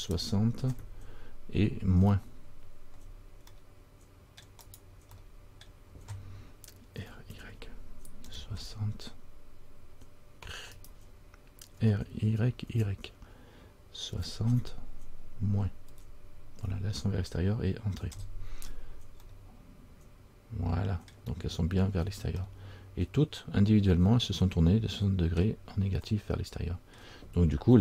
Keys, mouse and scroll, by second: 5.3 scroll up 1, 5.4 middle click, 5.8-7.1 scroll down 1, 7.1 r, 11.9 r, 19.4 scroll up 1, 19.5 middle click, 21.7-22.5 scroll down 3, 22.6 middle click, 25.6-26.0 scroll down 1, 26.3 middle click, 27.1-27.8 scroll down 1.